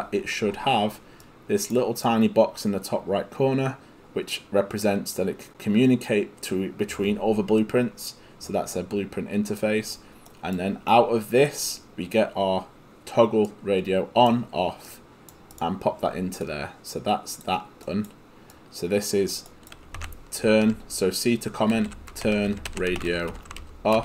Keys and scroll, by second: 20.0 c, 21.5-24.0 typing.